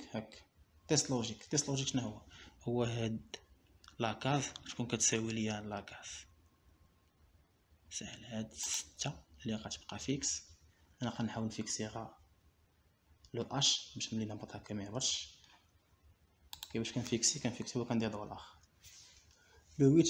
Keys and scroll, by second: 19.4 ;.